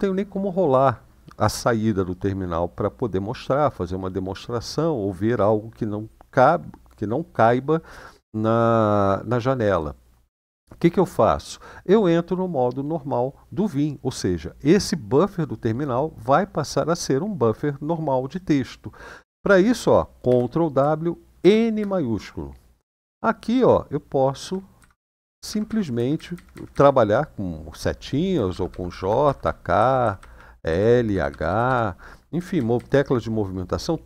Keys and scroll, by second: 20.1 ctrl+w, 21.1 shift+n, 22.8-24.2 Up, 24.5 Up, 24.7 Up, 24.9 Up, 25.2 Up, 25.4 Up, 25.7 Down, 25.9 Down, 26.1 Down, 26.3 Down, 26.4-34.0 Down, 28.1-33.0 typing.